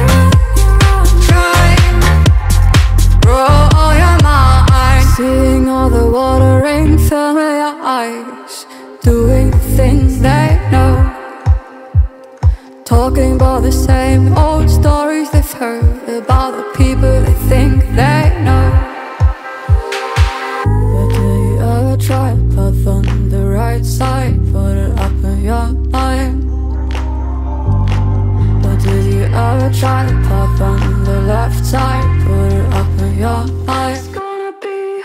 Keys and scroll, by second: 4.8 ctrl+j, 8.0 ctrl+=, 8.2 ctrl+=, 8.5 ctrl+=, 8.8 ctrl+=, 12.8-13.7 typing, 34.1 ctrl+-.